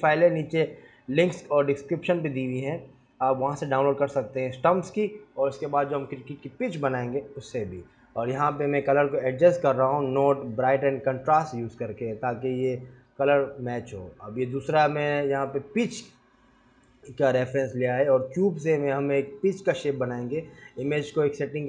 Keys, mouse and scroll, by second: 10.6 r, 11.6 g, 12.2 shift+a, 13.3 scroll down 3, 13.9 scroll up 3, 14.0 s, 14.9 click, 15.5 click, 16.0 click, 16.3 click, 18.1 click, 19.0 click, 19.3-19.6 scroll up 3, 19.6 click, 19.6 s, 20.2 g, 21.0 s, 21.5-21.6 scroll down 5.